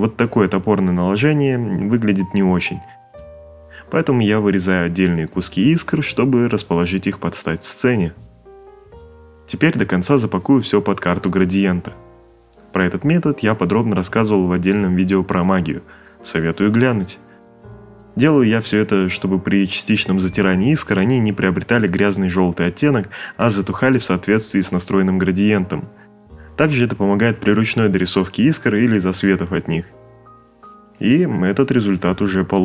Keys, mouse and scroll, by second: 0.0 alt+click, 0.3 shift+click, 0.8 click, 1.2 click, 1.8 click, 1.9 v, 2.1 ctrl+click, 2.3 click, 2.5 click, 2.9 click, 3.4 Return, 3.5 click, 3.7 click, 4.4 ctrl+c, 4.6 click, 4.9 ctrl+click, 5.2 click, 5.8 click, 5.9 click, 6.3 Return, 6.7 click, 7.1 shift+click, 7.3 click, 7.4 ctrl+v, 7.5 ctrl+click, 7.7 click, 8.0 ctrl+click, 8.2 Return, 8.3 click, 9.1 click, 10.0 click, 11.1 click, 12.4 click, 13.2 click, 16.9 click, 17.2-18.6 typing, 18.2 click, 19.4 right click, 19.9 right click, 20.2 click, 20.4 x, 20.5 right click, 20.6 click, 20.9 space, 21.0 ctrl+click, 21.1 ctrl+click, 21.2 right click, 21.3 click, 21.7 x, 22.5 x, 22.6 click, 22.9 right click, 23.0 click, 23.1 right click, 23.2 click, 23.5 click, 23.8 right click, 23.9 click, 24.5 click, 24.8 right click, 24.9 click, 25.1 click, 25.2 ctrl+z, 25.5 click, 25.6-26.5 typing, 25.6 click, 26.2 click, 26.5 right click, 26.6 click, 27.0 click, 27.6 ctrl+z, 27.7 right click, 27.9 click, 28.0 right click, 28.1 click, 28.2 7, 28.4 click, 28.9 right click, 29.0 click, 29.4 right click, 29.4 click, 29.7 click, 29.8 right click, 29.9 click, 30.2 right click, 30.2 click, 30.3-32.6 typing, 30.7 right click, 30.7 click, 31.0 right click, 31.2 click, 31.7 right click, 31.8 click, 32.0 click.